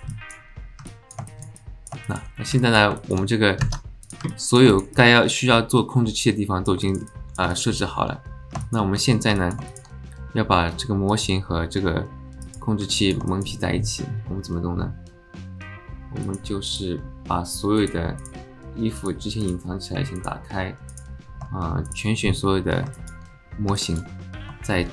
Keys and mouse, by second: 0.1 alt+click, 0.9 alt+click, 1.3 alt+shift+click, 1.5-1.9 alt+middle drag, 2.0 shift+middle click, 2.6 alt+middle click, 3.0 alt+shift+middle click, 3.6 ctrl+Tab, 4.3 alt+drag, 4.7 shift+click, 5.0-6.6 drag, 6.6 alt+middle click, 6.9 alt+shift+middle click, 7.1 alt+middle drag, 7.5 alt+shift+middle drag, 8.6 alt+shift+drag, 9.4 alt+middle click, 9.7 shift+middle click, 12.4 click, 12.9 alt+middle drag, 13.3 shift+middle click, 16.2 click, 16.7 click, 17.8 click, 18.2 click, 19.0 click, 19.4 click, 20.2 click, 20.9 click, 21.8 shift+click, 23.0 alt+shift+middle click, 23.8 alt+middle click.